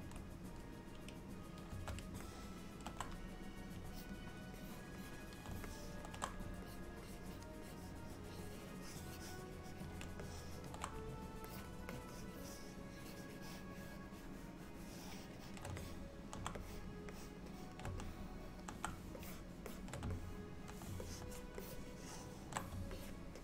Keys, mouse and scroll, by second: 2.3 shift+middle click, 4.0 shift+click, 4.6 shift+click, 5.7 shift+middle click, 6.7 shift+click, 7.1 shift+click, 7.7 shift+click, 9.0 shift+click, 10.3 shift+middle click, 11.5 shift+click, 11.9 shift+click, 13.3 shift+click, 15.5 shift+click, 15.9 middle click, 16.7 shift+click, 17.2 shift+click, 17.9 shift+click, 18.1 middle click, 19.3 shift+click, 19.7 shift+click, 20.2 middle click, 21.1 shift+click, 21.7 shift+middle click, 22.1 shift+middle click, 23.0 middle click.